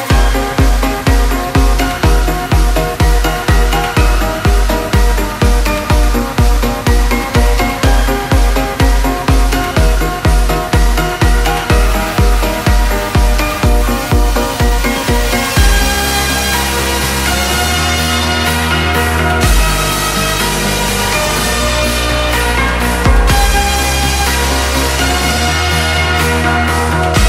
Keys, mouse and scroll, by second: 0.0-2.0 drag, 2.0 scroll up 1, 2.7 typing, 4.6 Return, 6.2 ctrl+0, 8.3 v, 10.4 v.